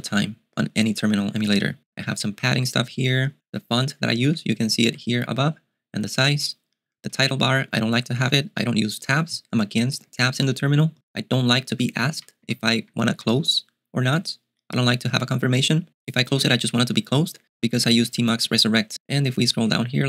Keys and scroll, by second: 2.0 ctrl+d, 2.4 ctrl+d, 3.5 ctrl+d, 3.7 ctrl+d, 4.3 ctrl+k, 4.9 ctrl+u, 7.1 ctrl+d, 11.6 ctrl+d, 12.2 ctrl+u, 12.5-13.2 typing, 19.2 ctrl+d, 19.6 ctrl+d.